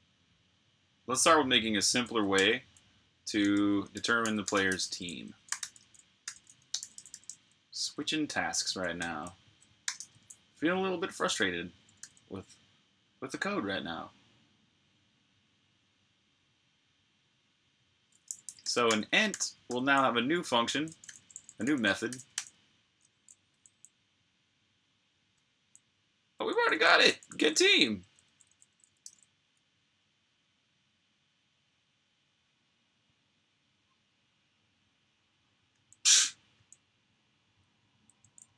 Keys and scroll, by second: 2.2 super+j, 3.3 Escape, 3.7-6.7 typing, 8.6-9.8 typing, 17.9-23.8 typing, 25.4 typing, 26.5 typing, 31.0 typing, 35.5 j, 37.3-38.5 typing.